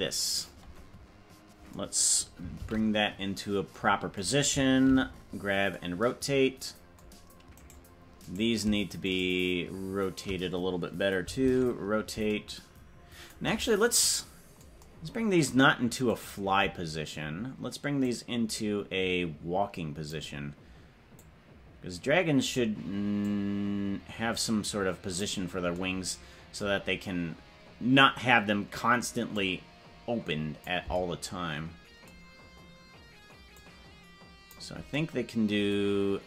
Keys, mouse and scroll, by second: 1.0 right click, 2.8 alt+g, 5.1 alt+r, 7.9 right click, 9.7 shift+right click, 11.6 alt+r, 16.7-18.0 right drag, 18.0-20.3 drag, 21.1-22.7 drag, 23.2-25.4 drag, 29.3-30.8 drag, 33.5-34.7 drag.